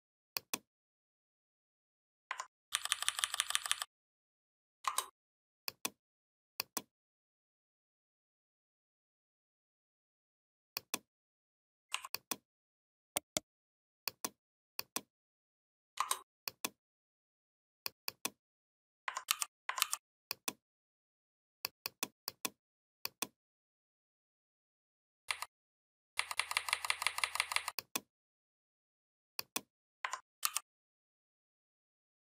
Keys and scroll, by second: 2.5 ctrl+[, 19.1 ctrl+g, 19.6 ctrl+g, 25.1 Down, 30.2 ctrl+g.